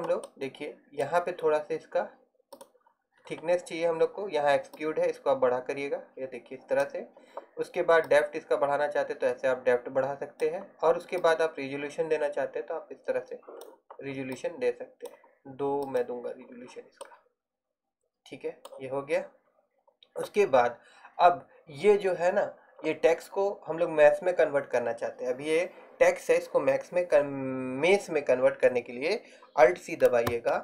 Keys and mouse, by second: 2.6-17.8 middle drag, 30.4 alt+c.